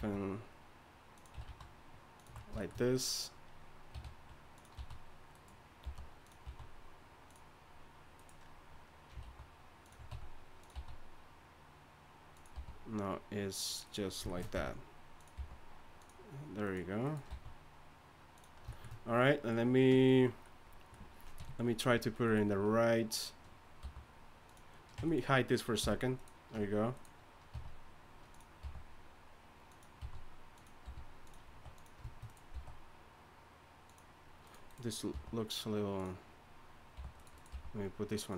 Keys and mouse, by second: 0.0 s, 1.4 alt+s, 3.9 r, 4.8 s, 5.8 g, 6.4 s, 8.4 right click, 9.2 alt+s, 10.1 r, 10.7 s, 12.5 r, 14.5 r, 15.3 g, 17.3 s, 21.4 KP_3, 23.8 g, 25.0 Tab, 25.8 h, 26.5 Tab, 27.5 r, 28.6 g, 30.0 s, 30.8 r, 31.5 s, 32.5 s, 35.1 g, 36.9 g, 37.5 g.